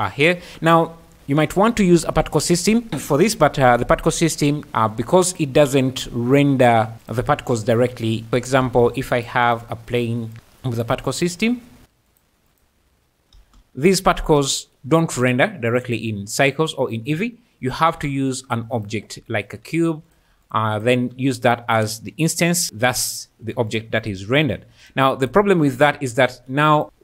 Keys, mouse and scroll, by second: 5.3 click, 8.6 shift+a, 11.1 click, 12.5 click, 13.3 space, 14.2 space, 15.9 click, 17.8 shift+a, 19.7 s, 20.1 click, 20.3 g, 20.4 click, 20.7 click, 22.9-23.8 drag, 24.9 click, 25.2 click, 25.9 alt+a, 26.7 click, 26.8 space.